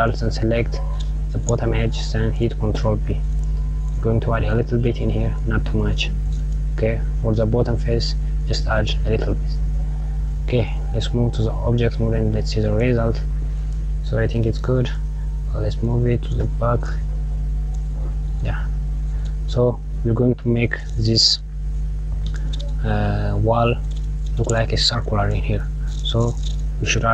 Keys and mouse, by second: 1.9 ctrl+b, 10.9 Tab, 11.8 click, 12.5 click, 14.6 click, 15.4 g, 17.8 KP_Subtract, 20.5 click, 21.9 click.